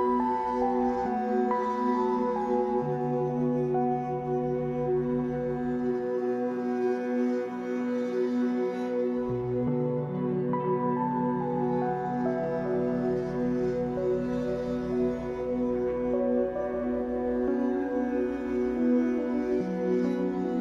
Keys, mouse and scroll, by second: 0.6 f, 1.2 ctrl+z, 1.5-2.5 right drag, 2.5 ctrl+z, 2.8 e, 3.4 s, 5.4 click, 5.5 l, 5.7-6.5 scroll down 3, 6.5 a, 6.7-7.5 scroll down 6, 7.0 Tab, 7.5 middle click, 7.8-8.3 scroll up 5, 8.3 Tab, 8.5 shift+middle click, 8.9 scroll up 4, 9.4 e, 10.1 ctrl+z, 10.4 Tab, 10.9 click, 11.1-14.1 drag, 14.5 g, 16.6 click, 16.8 scroll down 3, 16.9-18.3 middle drag, 18.3-19.1 scroll up 5, 18.5 shift+middle drag, 19.1 click, 19.3-19.7 middle drag, 19.7 Tab, 20.2 alt+middle click.